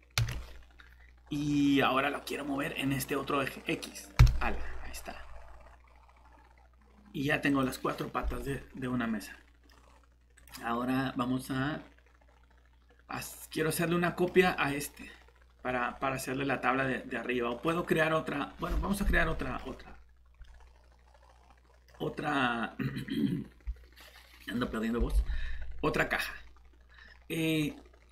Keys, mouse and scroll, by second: 1.9 typing, 4.2 x, 6.7-7.5 typing, 8.3 middle click, 9.8-10.4 scroll up 1, 10.4 click, 13.1 middle click, 25.1-27.6 scroll up 1, 27.6-28.1 scroll down 1.